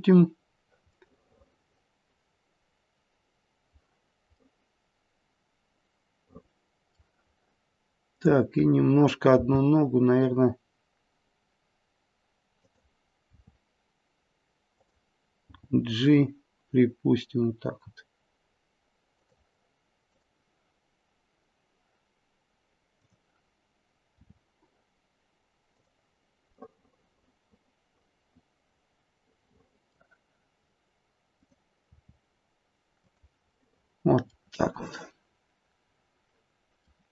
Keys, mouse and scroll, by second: 0.9 middle click, 4.3 middle click, 8.0 click, 9.3 g, 13.3 r, 15.4 g, 20.0 click, 22.8 click, 24.2 r, 26.6 middle click, 31.3 click, 31.9 r, 33.5 middle click, 33.6 middle click, 34.2 middle click, 34.9 middle click, 35.2 middle click, 35.4 middle click.